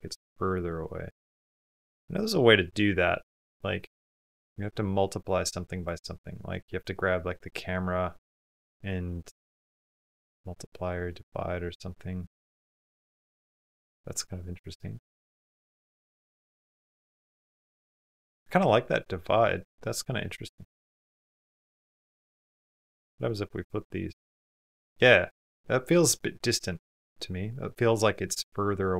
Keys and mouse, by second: 2.0-3.4 middle drag, 5.0 click, 5.5 click, 7.2 click, 10.1 middle click, 11.7 middle click, 13.4 click, 13.9 middle click, 14.7 middle click, 16.0 middle click, 17.2 middle click, 20.0 middle click, 20.9 middle click, 21.3 middle click, 23.3 click, 24.5 middle click, 26.8-28.8 middle drag.